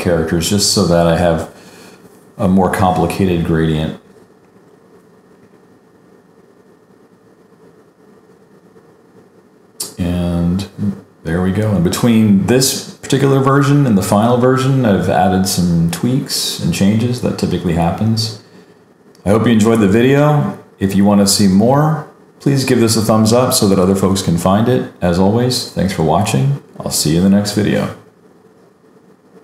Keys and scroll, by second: 0.5 super+s, 3.3 super+-, 3.4 super+=, 4.1 super+e, 4.5 super+d, 7.1 super+j, 10.1 super+s, 10.6 super+=, 10.9 super+-.